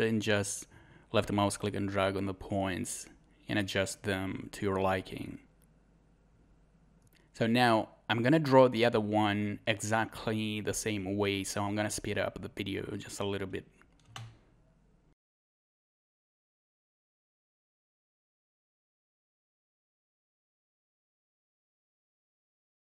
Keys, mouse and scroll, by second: 6.8 click, 7.8 scroll down 1, 8.6-9.2 scroll up 1, 10.0 scroll down 1, 10.0 scroll up 1, 11.3 scroll up 1, 14.7 scroll up 1, 17.0 scroll down 1, 17.3 scroll up 1, 18.0 scroll down 1, 18.0 scroll up 1, 18.9 click, 20.0 scroll down 1, 20.0 scroll up 1, 21.9 scroll down 1, 22.3 scroll up 1.